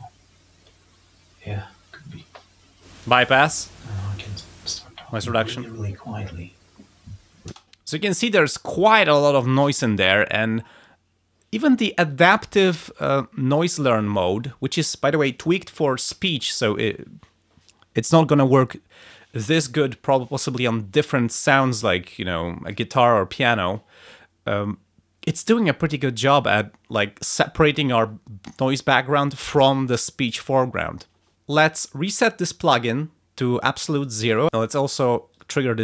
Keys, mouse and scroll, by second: 2.7 click, 4.6 click, 7.4 space, 34.2 click, 35.3 click.